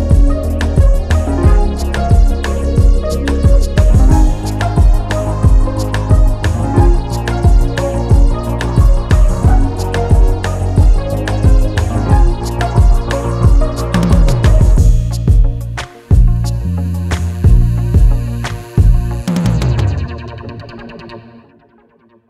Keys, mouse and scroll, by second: 0.6 ctrl+v, 1.4 ctrl+a, 3.2 click, 5.3 click, 7.6 click, 8.4 click, 9.9 scroll up 1, 10.9 ctrl+k, 11.7 click.